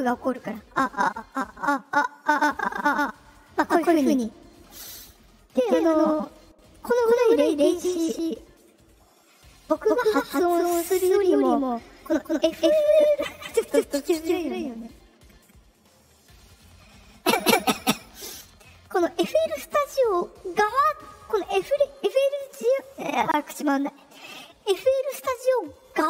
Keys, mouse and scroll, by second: 0.4 click, 1.8 click, 18.2 click.